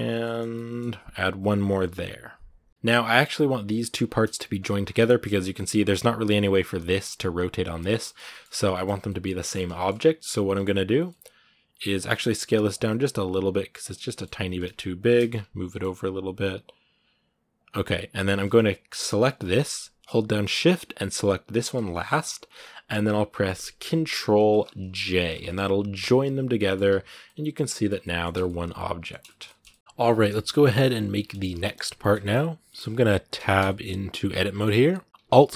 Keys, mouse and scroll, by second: 0.0 middle click, 0.2 scroll down 2, 0.3 middle click, 0.9 ctrl+r, 2.7 middle click, 2.8 scroll down 2, 2.9 middle click, 3.4 right click, 4.0 g, 4.6 scroll up 2, 4.8 right click, 5.0 middle click, 5.5 r, 6.0 right click, 6.4 scroll down 1, 6.6 r, 7.2 right click, 7.4 scroll down 1, 7.6 middle click, 7.8 scroll up 1, 7.8 shift+middle click, 8.3 scroll down 4, 8.5 shift+middle click, 8.8-9.4 scroll up 2, 8.8 middle click, 9.6-10.7 shift+middle drag, 10.7 right click, 10.9-12.1 middle drag, 12.1 s, 12.7 middle click, 13.0 s, 13.9 middle click, 14.2 g, 14.9 middle click, 15.1 scroll up 1, 15.4 g, 17.6 scroll down 2, 19.0 right click, 19.2-21.4 middle drag, 21.4 shift+right click, 21.7-25.1 middle drag, 25.1 ctrl+j, 26.4 middle click, 26.7 a, 27.0 middle click, 27.7 scroll up 2, 27.8 middle click, 28.1 Tab, 28.2-29.7 middle drag, 29.7 r, 30.2 shift+middle click, 30.6 scroll up 2, 31.4 shift+middle click, 31.7-32.5 scroll up 3, 31.8 shift+middle click, 32.5 middle click, 32.8-33.1 scroll up 2, 33.1 Tab, 33.4-35.5 shift+middle drag.